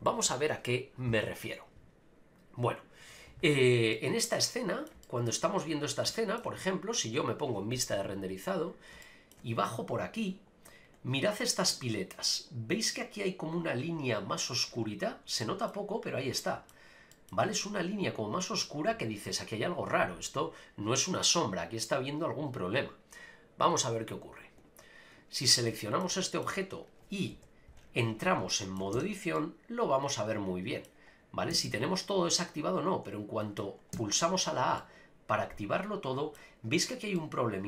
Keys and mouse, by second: 3.9 middle click, 5.0 shift+middle click, 6.1 shift+middle click, 9.0-9.3 shift+middle drag, 11.7 click, 15.4-15.7 middle drag, 16.4 middle click, 17.1 middle click, 25.8 shift+middle drag, 27.3 KP_Decimal, 28.5-28.8 shift+middle drag, 28.9 Tab, 29.4-30.8 middle drag, 31.5 a, 31.6 a, 32.3-33.6 middle drag, 33.9 a, 34.8-36.3 middle drag, 37.1-37.6 middle drag.